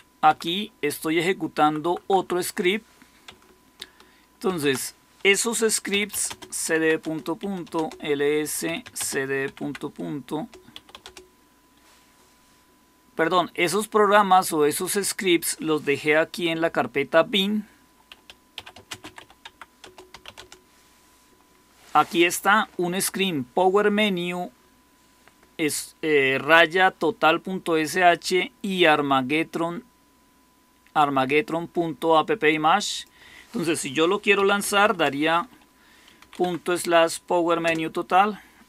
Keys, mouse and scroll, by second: 0.2 Right, 0.4 Right, 0.5-1.9 Right, 2.1 Right, 4.4 ctrl+x, 5.6-11.1 typing, 6.9 Return, 10.3 Return, 14.1-18.5 drag, 18.2-20.8 typing, 19.7 Return, 34.8-36.6 typing, 37.5 Return.